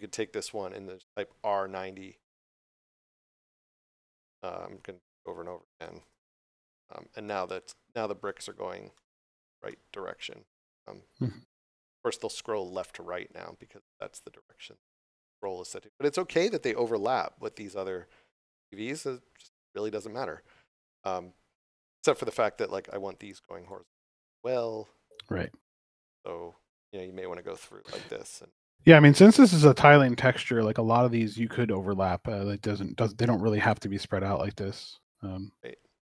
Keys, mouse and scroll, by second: 1.4 r, 3.7 right click, 5.0 right click, 5.4 shift+r, 5.6 right click, 7.2 middle click, 7.8 scroll up 1, 8.8 middle click, 10.2 scroll down 1, 12.6 scroll up 1, 15.9 scroll up 1, 16.4 shift+middle click, 23.5 shift+right click, 24.2 shift+right click, 25.6 shift+right click, 27.4 shift+middle click, 28.1 scroll up 1, 29.7 scroll down 1, 29.7 r, 30.9 Return, 31.8 right click, 33.7 scroll down 1, 34.5 scroll up 1.